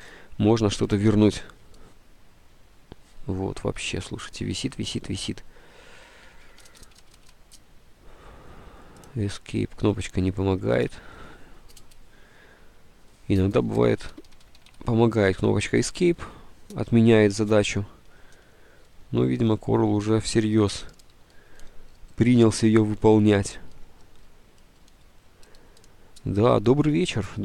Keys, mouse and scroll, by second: 6.2 Escape, 6.4 Escape, 7.0 Escape, 7.1 Escape, 7.4 Escape, 10.0 Escape, 10.9 Escape, 14.4 Escape, 14.7 Escape.